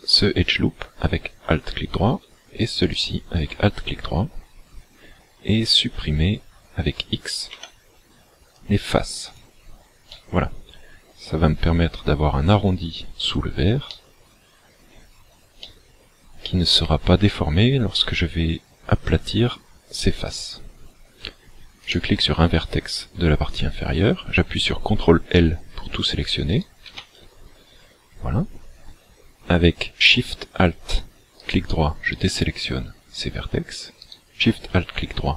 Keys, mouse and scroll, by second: 3.0 alt+shift+right click, 7.6 x, 10.2 middle click, 13.9 middle click, 15.7 middle click, 21.9 right click, 26.9 ctrl+l, 31.4 alt+shift+right click, 34.1 alt+shift+right click.